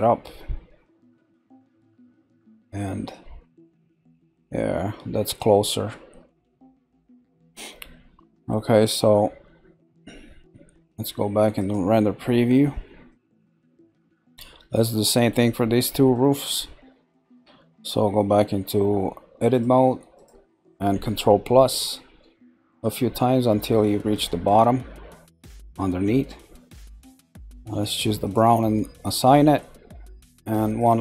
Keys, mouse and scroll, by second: 6.0 scroll down 1, 7.2 scroll up 2, 7.9-9.0 shift+middle drag, 9.0 scroll up 1, 11.7 click, 12.2 scroll down 2, 12.7 middle click, 13.2-13.7 scroll up 1, 13.7-17.7 shift+middle drag, 17.7 Tab, 19.5 click, 20.1 shift+click, 24.7-27.7 middle drag, 28.2 click, 29.0 click, 29.6-30.7 middle drag, 30.7 click.